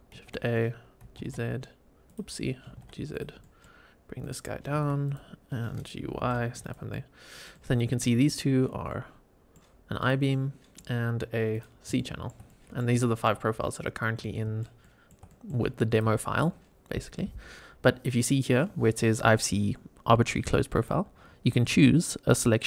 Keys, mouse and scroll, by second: 0.1 shift+a, 0.9 g, 1.1 z, 2.0 click, 2.6 g, 2.7 z, 3.0 click, 3.3 middle drag, 4.1 click, 4.6 g, 4.6 z, 5.0 click, 6.0 g, 6.1 y, 6.6 click, 6.8-7.4 middle drag, 7.4-7.9 middle drag, 8.2 click, 8.5 scroll up 1, 8.8-9.5 middle drag, 9.9 click, 10.2 middle click, 11.4 click, 11.9 shift+middle drag, 12.4-12.7 middle drag, 12.9 shift+middle drag, 13.9-14.2 scroll down 1, 14.2 shift+middle click, 14.7 shift+middle click, 15.2 middle click, 15.8 click, 20.7-22.6 drag.